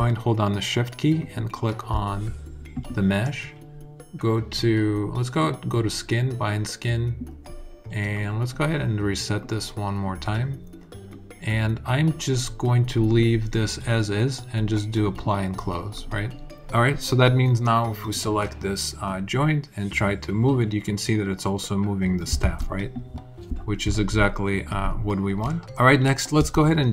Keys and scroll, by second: 22.2 super+z, 26.1 space.